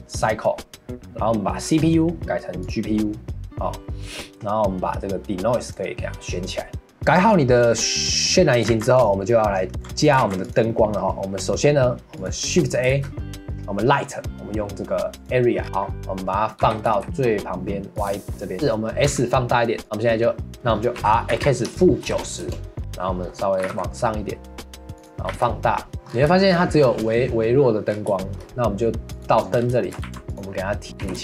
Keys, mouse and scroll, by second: 5.6 click, 7.0 ctrl+s, 8.7 ctrl+s, 9.4 middle click, 9.5 right click, 9.7 scroll down 4, 9.8 right click, 10.2 ctrl+s, 10.7-12.2 right drag, 10.7 middle click, 12.2 click, 12.9 shift+a, 15.6 scroll down 1, 15.6-16.6 middle drag, 16.6 g, 18.2-18.5 shift+middle drag, 18.5 scroll down 4, 18.7-19.1 middle drag, 19.1 s, 19.8 middle click, 20.5 ctrl+z, 21.0 r, 22.8-23.6 middle drag, 23.6 g, 25.3 s, 25.9 middle click, 26.1-26.8 scroll up 3, 26.3-26.8 shift+middle drag, 28.1 shift+middle click, 29.1 click, 29.6 scroll down 3, 29.8 shift+middle drag, 30.0 ctrl+s, 30.9 click.